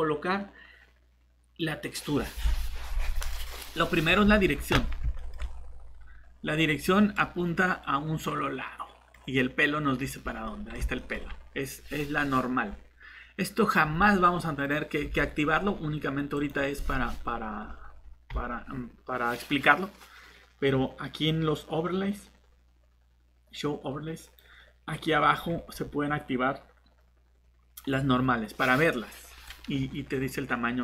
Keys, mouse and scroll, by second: 12.6-12.9 scroll down 1, 16.3 click, 17.6-18.2 scroll down 1, 24.2 click, 25.1-28.9 scroll down 1, 29.4 click.